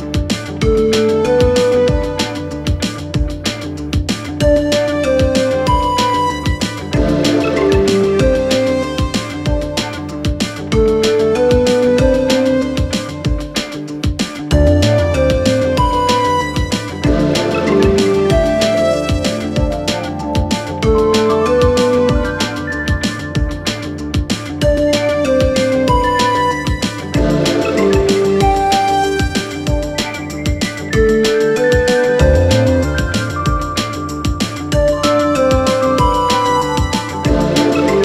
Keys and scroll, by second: 2.5 ctrl+z, 9.8 ctrl+z, 14.9 ctrl+z, 19.4 Delete.